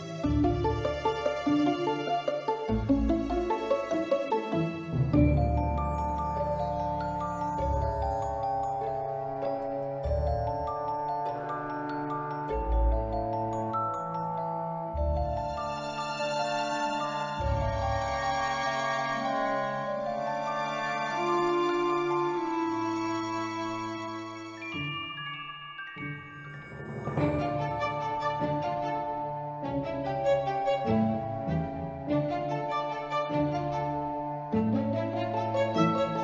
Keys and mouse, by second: 0.8 shift+a, 1.0 shift+a, 3.1 s, 3.9 click, 4.9-5.9 middle drag, 6.2 ctrl+middle click, 9.2 click, 9.9-10.6 right drag, 11.5 shift+middle drag, 12.7 click, 13.8 click, 14.9-15.3 ctrl+middle drag, 15.6-16.0 middle drag, 16.3-17.5 drag, 19.5 shift+d, 19.6 shift+Return, 20.5-21.3 drag, 25.7 drag, 26.7 click, 28.7 click, 29.1 click, 31.6 drag, 32.9 click, 33.5 click, 34.6-35.2 drag.